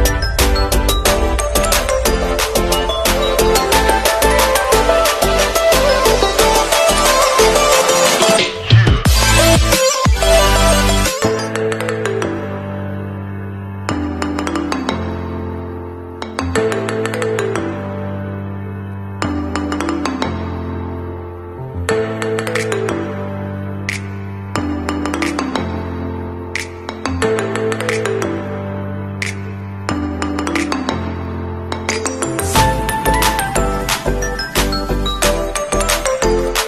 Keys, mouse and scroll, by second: 2.3 alt+click, 3.6 click, 5.9 Down, 7.2 alt+scroll down 1, 8.5-10.4 scroll down 1, 27.9 alt+scroll up 1, 28.9 alt+Right, 29.1 alt+Right, 30.5 Right, 32.1 ctrl+a, 32.9 alt+Right, 33.2 alt+Right, 33.4 alt+Right, 35.4 click.